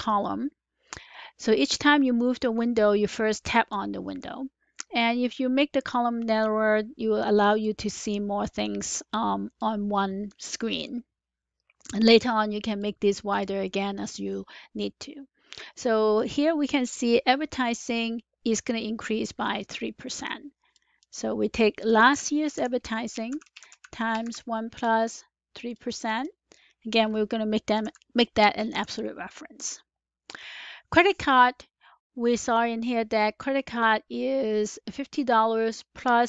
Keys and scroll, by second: 22.0-24.2 typing, 27.8 F4, 28.4-29.1 typing, 29.5 Return, 34.5 typing.